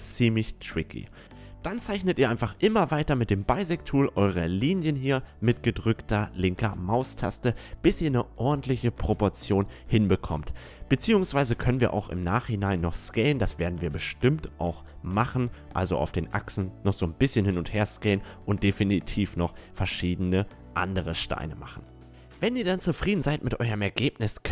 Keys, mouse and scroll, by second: 0.0 a, 0.3 space, 8.0 a, 9.9 space, 11.5 a, 11.9 space, 18.4 a, 18.7 click, 21.1 a, 21.5 space, 22.0 a.